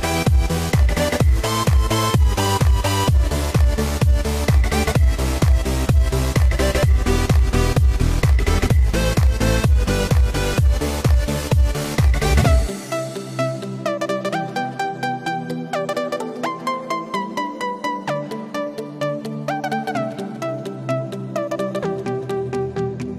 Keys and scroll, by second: 11.0 Return, 12.4 x, 17.9 super+z, 18.8 alt+super+z, 19.1 alt+super+z, 19.5 alt+super+z, 20.2 alt+super+z, 21.5 shift+super+z.